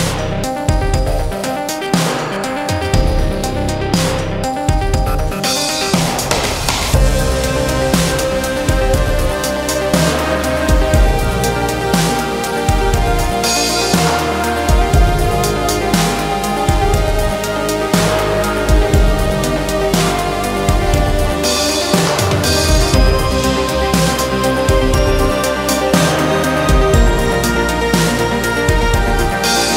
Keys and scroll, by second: 7.3 Escape, 12.3 Escape, 13.8 F3, 17.0 c, 17.2 e, 17.6 Escape.